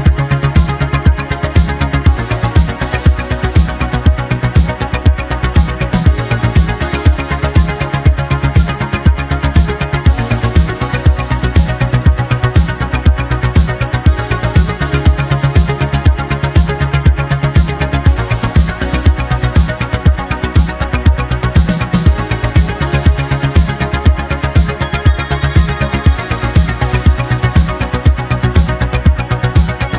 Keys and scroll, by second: 9.5 ctrl+z, 11.1 space, 17.0 ctrl+z, 17.6 ctrl+z, 18.9 ctrl+z, 21.9 ctrl+z, 24.6 ctrl+z, 26.3 space, 28.2 space, 29.1 ctrl+z.